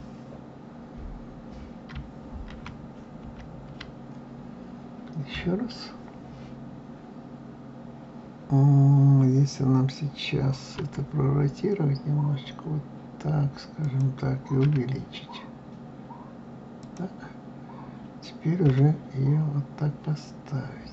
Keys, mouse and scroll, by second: 2.4 ctrl+z, 3.1 ctrl+z, 5.3 KP_3, 6.6-8.0 scroll up 2, 10.7 r, 14.6 s, 18.6 g.